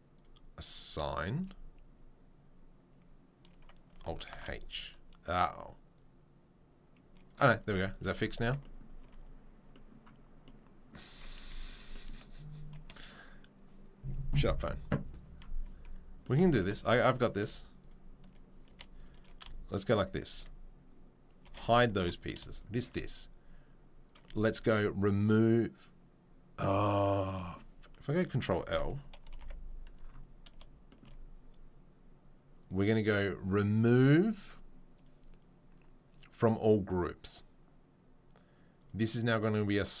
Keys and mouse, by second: 0.2-0.9 middle drag, 0.9-4.4 drag, 3.9 a, 4.3 alt+h, 9.0 Tab, 9.0 z, 11.1 Tab, 11.4 z, 11.7-17.2 drag, 11.7-17.2 right drag, 17.2-18.2 middle drag, 17.2 2, 17.4 3, 18.2 click, 18.2 right click, 18.3-22.1 middle drag, 18.7 3, 21.4 h, 22.0 2, 22.1 click, 22.4-24.0 shift+middle drag, 24.0-32.7 drag, 32.7 middle click, 32.9-38.8 drag, 38.8-40.0 middle drag.